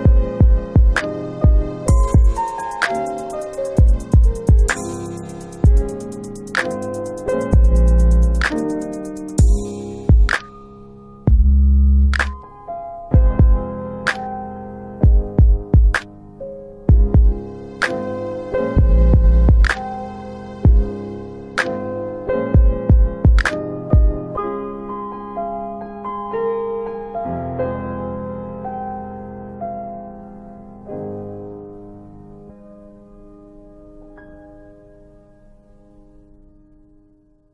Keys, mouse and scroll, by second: 16.4 click, 17.4 click, 19.3 click, 32.8 click, 34.8 click.